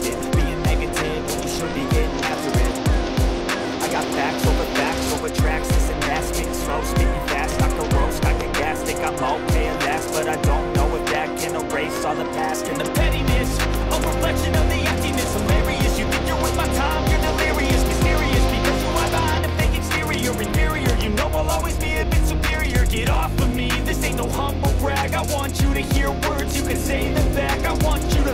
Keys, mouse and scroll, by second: 0.4-1.5 middle drag, 1.6 click, 3.8 click, 6.3 click, 7.3 click, 11.8-13.0 middle drag, 14.1-15.3 middle drag, 16.2-17.3 middle drag, 17.8 click, 20.1 click, 21.0 click, 23.8-24.8 scroll, 25.2-26.0 scroll, 26.0 scroll, 26.1 click, 26.5 click, 27.4-28.3 typing, 27.7 click.